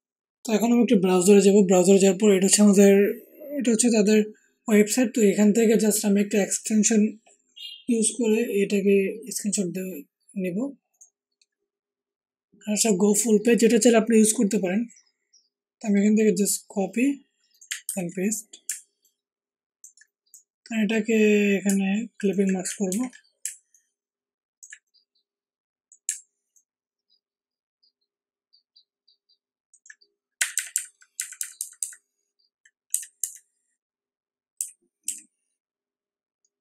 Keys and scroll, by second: 17.8 ctrl+v, 18.6 ctrl+alt+v, 22.8 ctrl+alt+t, 23.4 ctrl+alt+t, 30.3 alt+Up, 30.5 alt+Up, 30.7 alt+Up, 31.1 alt+Up, 31.3 alt+Up, 31.5 alt+Up, 31.7 alt+Up, 32.9 Right, 33.2 Right, 34.5 Down, 35.0 Left.